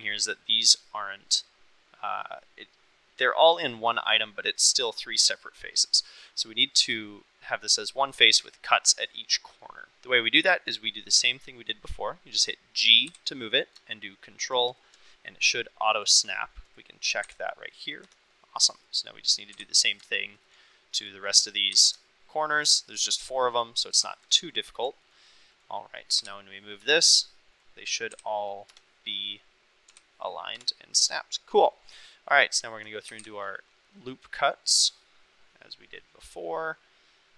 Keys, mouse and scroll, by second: 13.0 g, 14.6 ctrl+click, 16.6 click, 17.2 g, 18.0 Escape, 19.5 g, 20.3 ctrl+click, 21.7 g, 22.5 ctrl+click, 23.9 g, 24.6 ctrl+click, 25.0 click, 25.5 click, 26.1 g, 26.8 Escape, 28.1 g, 28.6 Escape, 29.2 click, 29.8 g, 30.5 Escape, 32.3 click, 33.0 ctrl+r.